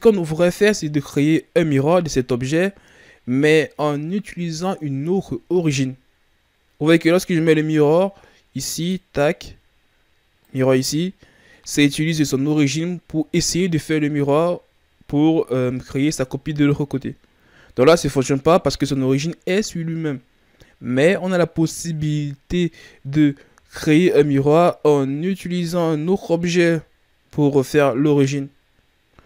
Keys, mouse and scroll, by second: 8.7 click, 14.3-14.8 scroll down 2.